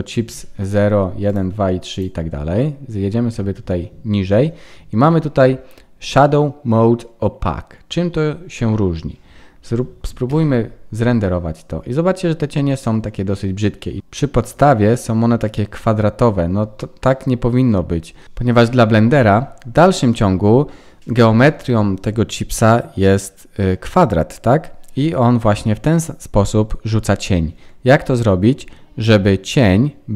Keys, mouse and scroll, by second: 0.3 scroll up 3, 0.6 click, 2.7 click, 2.7-3.4 scroll down 2, 3.4-4.9 scroll down 18, 10.4 F12.